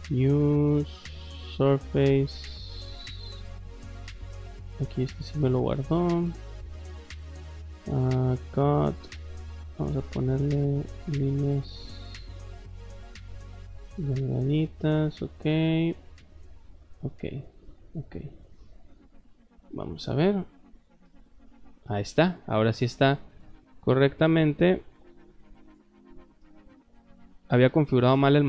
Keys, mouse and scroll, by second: 1.7 click, 3.3 click, 4.5 middle click, 5.1 click, 5.7 click, 7.7 middle click, 9.2 click, 9.7 middle click, 11.9 middle click, 12.7 click, 13.5 click, 14.8 click, 16.9 click, 17.8 click, 18.8 click, 19.4 middle click, 21.0-22.2 shift+middle drag, 22.5 scroll down 2, 22.5 middle click, 22.8 middle click, 23.3 shift+middle click, 23.9 middle click, 24.2 middle click, 25.6 click, 26.4 shift+middle click, 27.7 middle click, 28.3 middle click.